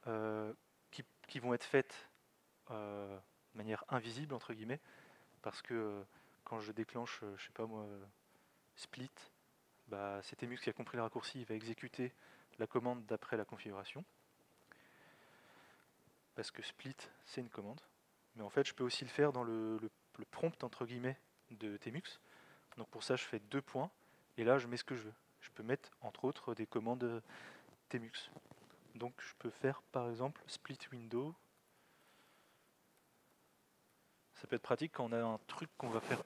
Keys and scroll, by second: 8.2 alt+x, 8.8 typing, 23.0 alt+x, 31.0-34.0 typing.